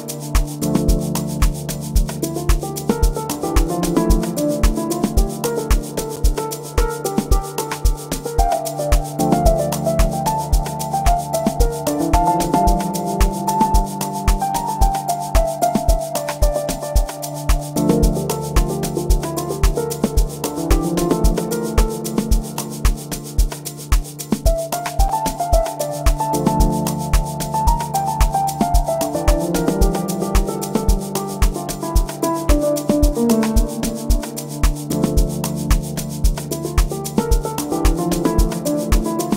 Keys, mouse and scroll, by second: 29.4 F7, 30.9 F6.